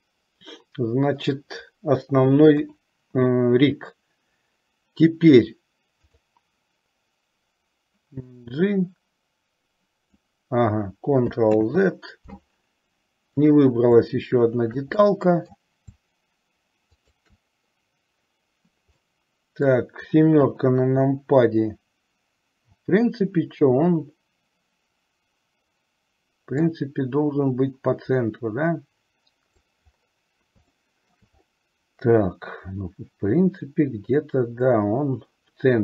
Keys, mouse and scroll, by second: 0.1-1.6 middle drag, 2.7 KP_7, 6.2 click, 8.6-10.3 drag, 11.6 ctrl+z, 13.6 click, 15.2 middle click, 17.1 shift+click, 19.2 middle click, 20.5 KP_7, 26.7 click, 27.5-29.8 drag, 30.8 shift+middle click.